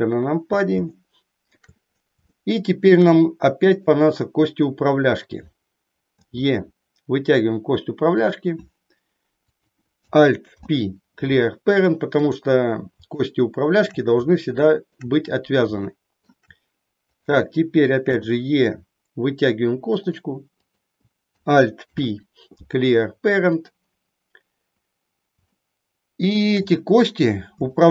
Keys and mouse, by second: 1.0 shift+middle click, 2.4 shift+middle click, 3.6 click, 6.3 e, 9.5 click, 10.4 alt+p, 13.3 shift+middle click, 14.4 shift+middle click, 15.8 shift+middle click, 17.0 click, 18.1 e, 20.0 click, 20.5 click, 21.9 alt+p, 25.5-26.6 shift+middle drag, 27.8 shift+middle click.